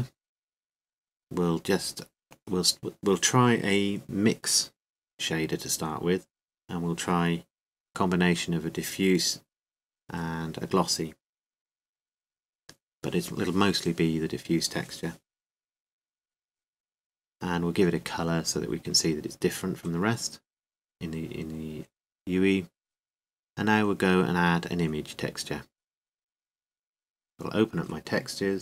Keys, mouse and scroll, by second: 1.0-16.8 drag, 19.8-24.1 drag, 26.1-28.6 drag.